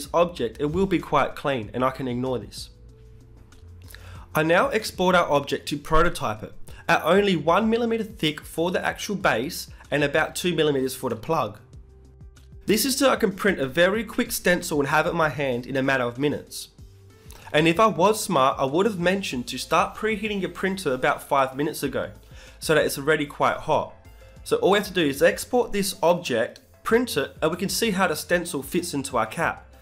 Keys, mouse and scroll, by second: 0.2-6.9 middle drag, 9.3 Tab, 11.0-13.0 drag.